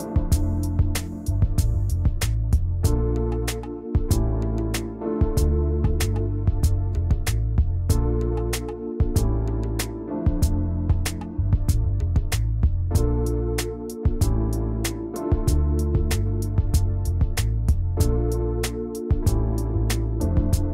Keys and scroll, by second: 5.0 ctrl+c, 12.7 ctrl+shift+[, 13.0 ctrl+].